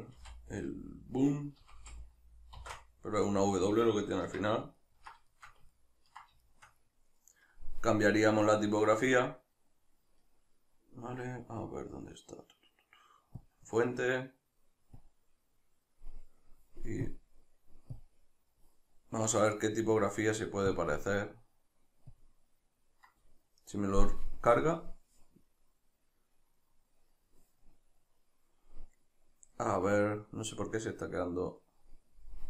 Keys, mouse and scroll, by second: 0.2 shift+b, 4.2 Tab, 4.8-13.4 ctrl+middle drag, 13.4-13.7 drag, 13.7-15.0 middle drag, 15.0-32.4 drag.